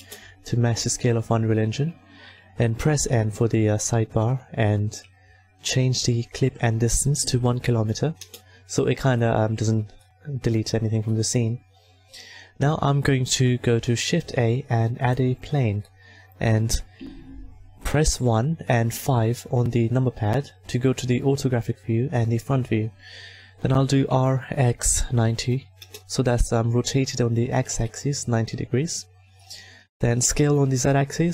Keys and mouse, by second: 2.8-9.1 drag, 2.8 n, 13.3 n, 13.9 shift+a, 17.8 KP_1, 18.9 KP_5, 24.1 r, 29.7 s.